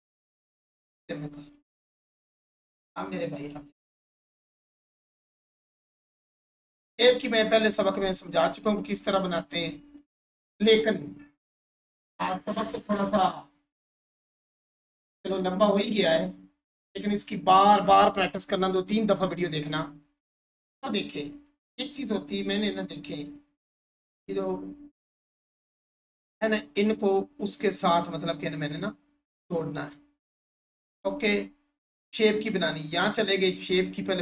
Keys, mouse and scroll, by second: 3.9 scroll down 1, 4.1 1, 4.5-5.1 scroll up 1, 6.0 scroll up 1, 6.5-10.0 alt+shift+drag, 21.3 click, 30.9 click.